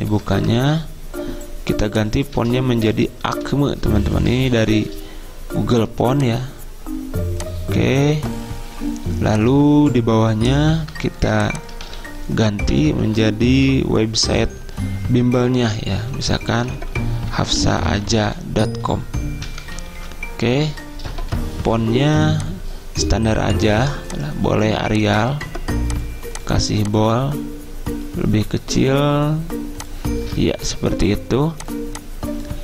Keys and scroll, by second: 0.2 Return, 0.7 ctrl+a, 3.0-3.4 typing, 4.3 Return, 5.4-6.2 typing, 7.3-8.1 typing, 12.0 ctrl+a, 12.8-14.9 typing, 16.5-18.3 typing, 19.5-20.3 typing, 21.3 ctrl+a.